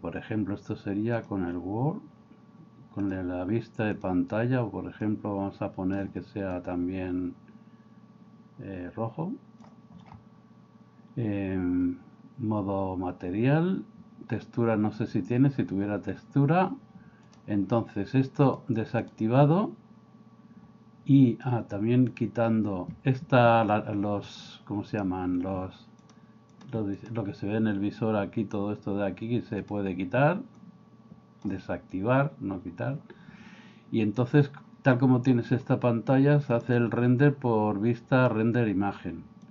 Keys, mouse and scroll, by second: 19.0 click, 22.1-23.9 drag, 24.9-27.9 drag, 29.7-32.2 drag, 36.5-39.5 drag.